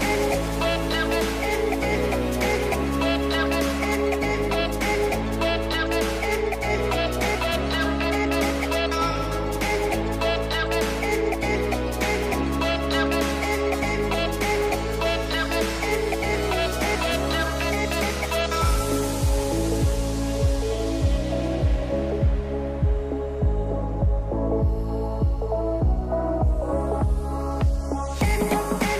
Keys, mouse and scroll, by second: 8.5 click, 11.3-14.1 middle drag, 14.2-14.6 scroll down 6, 14.6-16.0 middle drag, 16.0 scroll up 2, 16.2 click, 16.5 Tab, 17.0 ctrl+r, 18.8 Tab, 19.4 Tab, 20.1 click, 21.0 e, 21.7 s, 22.3 Tab, 22.7-24.2 middle drag, 24.2 scroll down 4, 24.4 middle click, 24.6 a, 24.6 a, 24.7 scroll up 4, 24.8 middle click, 25.4 scroll down 1, 25.5 middle click, 25.7 scroll up 2, 25.9 click, 26.1 scroll down 1, 26.2-28.1 middle drag.